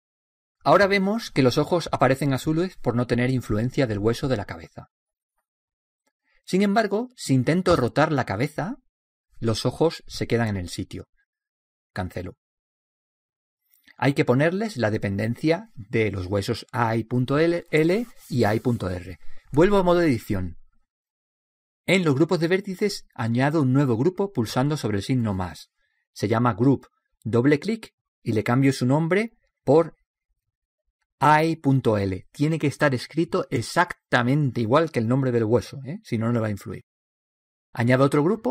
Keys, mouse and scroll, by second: 0.2 click, 8.5 r, 21.6-22.7 drag, 25.8-29.9 drag.